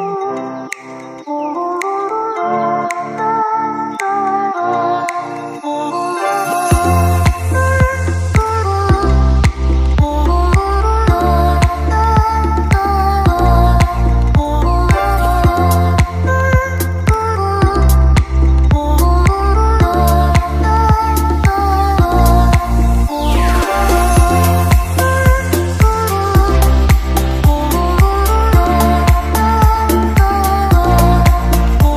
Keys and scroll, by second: 11.1 ctrl+-, 17.8 ctrl+z, 25.4 ctrl+z, 28.7 ctrl+z, 29.4 ctrl+z, 30.9 ctrl+z.